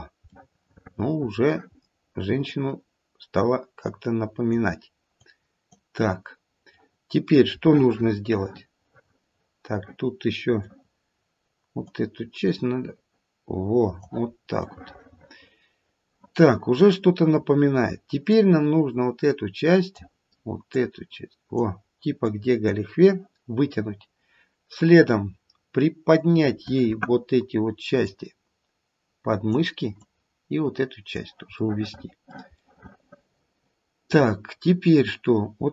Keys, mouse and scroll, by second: 0.3 middle click, 1.6-2.4 scroll up 3, 2.4 click, 3.9 click, 7.0 middle click, 7.6 middle click, 11.8 click, 14.3 scroll down 2, 14.5 middle click, 18.3 click, 20.7 click, 22.2 click, 24.3-25.2 scroll up 1, 25.2-27.4 scroll up 1, 28.0 click, 30.0 click, 32.6 middle click, 32.9 middle click, 33.7 middle click, 34.4 middle click, 34.4-35.7 scroll down 2.